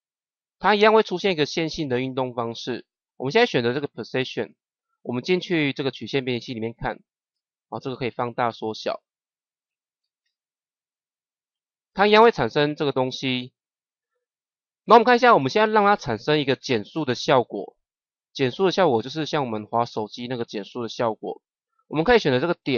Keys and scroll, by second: 10.1 KP_0.